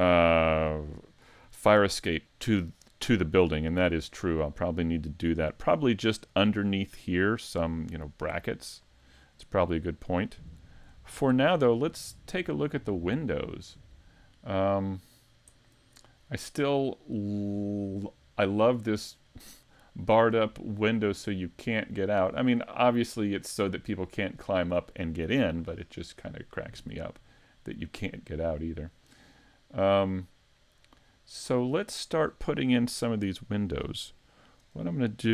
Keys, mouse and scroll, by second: 1.8 middle click, 3.1 middle click, 5.3 middle click, 8.9 middle click, 10.5 shift+middle click, 11.3 right click, 12.1 scroll down 2, 12.4 middle click, 13.6 middle click, 13.7 shift+middle click, 15.2 scroll up 2, 15.6 middle click, 16.2-16.7 scroll up 1, 16.7 middle click, 17.4 middle click, 19.4 scroll up 2, 19.9 middle click, 22.0 middle click, 25.3 middle click, 25.4 middle click, 25.6-26.2 scroll down 2, 26.2 middle click, 26.2-28.0 scroll down 1, 28.0-28.9 scroll up 3, 30.2-30.9 scroll down 2, 30.9 middle click, 32.8 middle click, 33.4 scroll down 3, 34.6 KP_1.